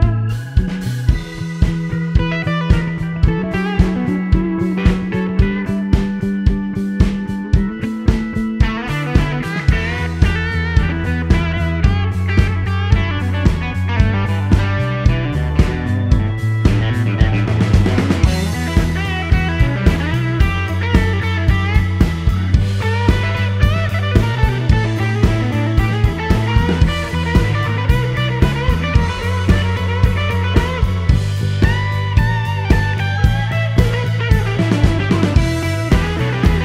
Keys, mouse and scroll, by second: 4.1-5.4 drag, 6.4-7.7 drag, 7.8-8.4 scroll up 2, 8.4 scroll down 1, 8.4 scroll up 1, 9.2 click, 10.2 a, 12.8-13.8 typing, 15.8-17.0 drag, 17.7 click, 21.1 click, 22.7 shift+d, 24.3 6, 25.0 Return, 26.6-28.3 drag, 28.3 scroll down 2, 28.4 middle click, 28.9 scroll up 1, 29.3 middle click, 30.3 click, 31.3 click, 31.8 click, 32.4-34.3 drag, 32.7 right click, 34.8 t, 36.0 click, 36.5 click.